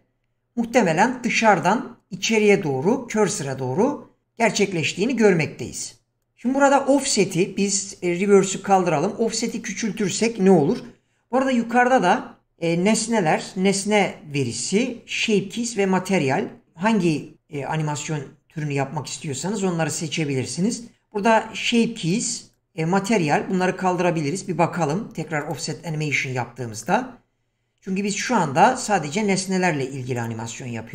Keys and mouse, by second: 8.7 click, 9.4-11.9 drag, 22.0 click, 25.5 click, 26.9 click, 30.1 click.